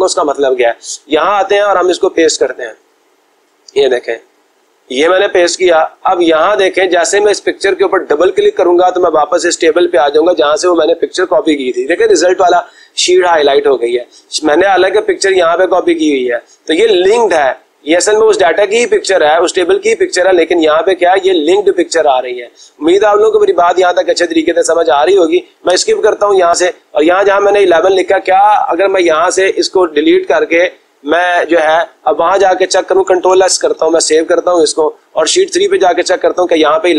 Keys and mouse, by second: 1.7 click, 3.0 click, 5.3 click, 8.3 click, 8.6 click, 15.5 click, 20.7 click, 21.0 click, 21.2 click, 24.9 click, 26.0 Escape, 27.8-28.9 drag, 29.8 Delete, 34.1 ctrl+s, 36.2 click.